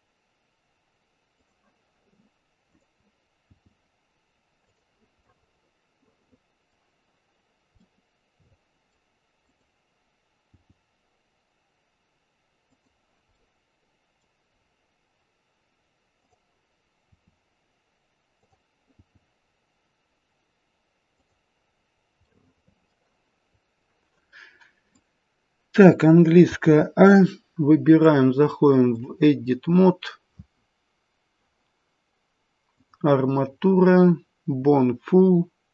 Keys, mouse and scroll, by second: 2.7 click, 3.4 g, 5.2 middle click, 7.8 middle click, 8.5 middle click, 9.4 click, 10.4 g, 13.3 middle click, 14.6-16.1 scroll down 2, 16.1 click, 16.1-16.7 scroll down 1, 17.1 r, 19.0 g, 21.8-23.5 scroll up 3, 22.2 middle click, 23.5 scroll down 2, 24.9 click, 26.5 a, 27.9 click, 30.6-31.1 scroll down 6, 32.7 click.